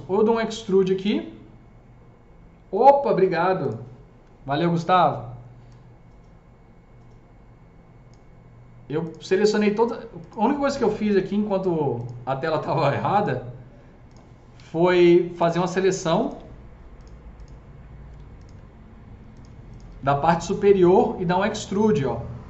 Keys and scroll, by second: 11.0 Delete, 14.4 q, 18.0 Delete, 18.4 Delete, 19.4 Delete, 19.8 Delete.